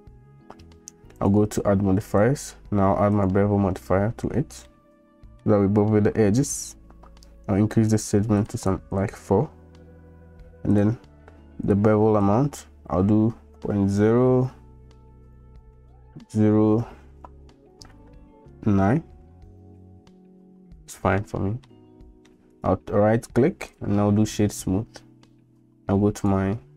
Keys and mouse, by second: 1.2 click, 2.2-3.4 drag, 4.7-5.4 middle drag, 8.4 click, 8.6 click, 9.0 click, 10.7-19.9 drag, 20.9 middle drag, 21.7-22.3 middle drag, 22.7-24.4 drag, 26.2 click.